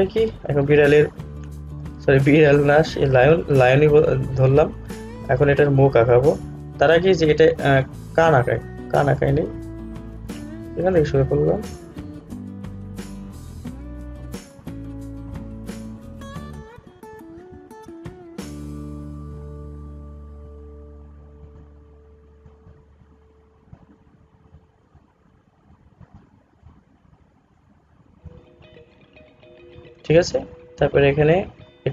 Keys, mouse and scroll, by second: 0.8 alt+scroll down 1, 5.1 scroll down 1, 11.0-27.6 drag, 31.4-31.9 drag.